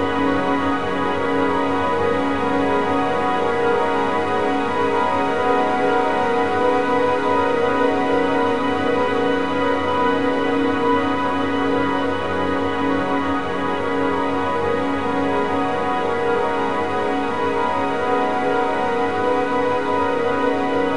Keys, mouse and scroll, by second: 1.5 a, 1.7 a, 2.5 click, 3.6 click, 5.1 a, 5.4 a, 6.1 click, 7.7-9.0 drag, 9.5 a, 9.7 a, 13.1-17.3 drag, 17.9 a, 18.1 a.